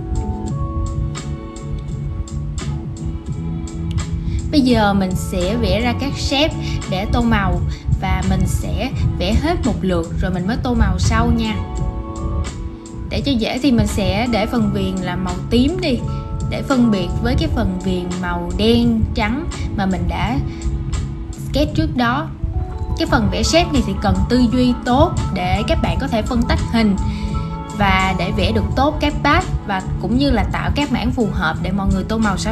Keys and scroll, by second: 19.5 super+g.